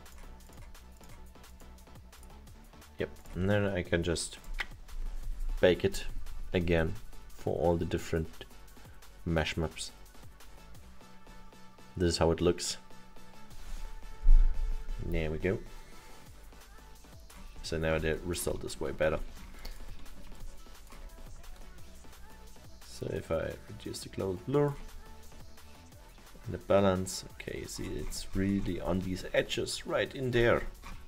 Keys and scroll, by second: 19.3 alt+7.